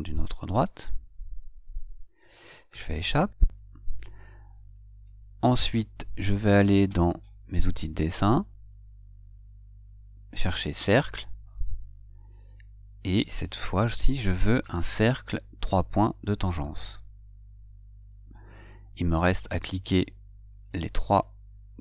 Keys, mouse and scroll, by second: 2.1 click, 3.4 Escape, 8.8 click, 21.4 click.